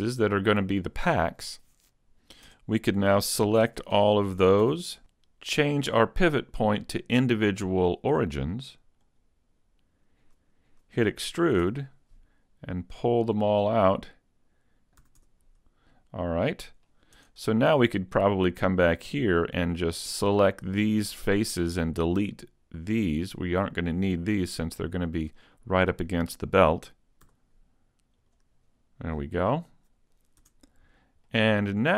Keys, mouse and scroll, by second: 2.5 Tab, 3.6 ctrl+Tab, 4.6 a, 5.1 middle click, 6.7 scroll down 1, 8.7 click, 11.6 e, 14.9 click, 15.0 a, 15.2 Tab, 16.0 middle click, 17.2 Tab, 17.5 middle click, 18.2 scroll up 2, 18.6 shift+middle click, 19.2 middle click, 20.0 shift+right click, 20.6 shift+right click, 21.2 shift+right click, 21.7 shift+right click, 22.2 shift+right click, 22.8 shift+right click, 23.5 shift+right click, 24.0 shift+right click, 24.5 shift+right click, 25.0 shift+right click, 25.4 middle click, 27.2 x, 29.2 middle click, 30.4 Tab, 30.9 scroll down 2, 31.3 middle click.